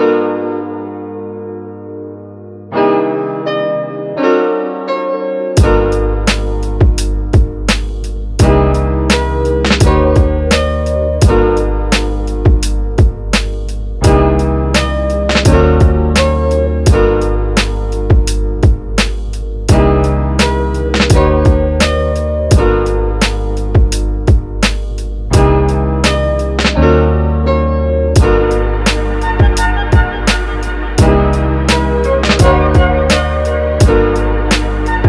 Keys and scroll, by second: 25.4 super+s, 25.8-29.9 typing, 29.5 Right.